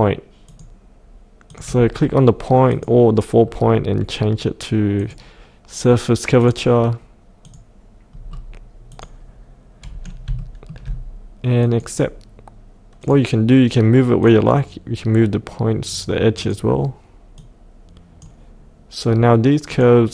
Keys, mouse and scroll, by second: 0.5 click, 3.4-5.0 scroll down 1, 5.0 click, 8.3-8.9 scroll down 1, 8.9 click, 9.8-10.2 scroll up 1, 10.4 shift+middle click, 11.6 click.